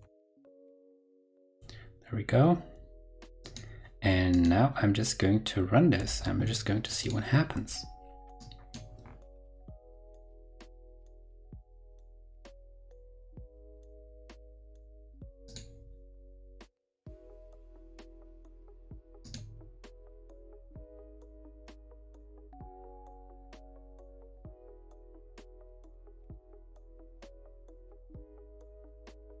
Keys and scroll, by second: 0.8 shift+super+Right, 0.8 super+v, 6.0 super+r.